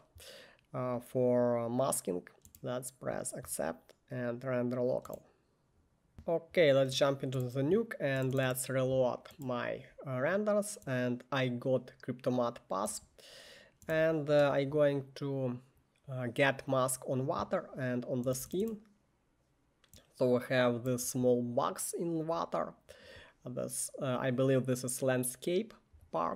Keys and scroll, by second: 6.1 Escape, 14.0 1, 18.4 1.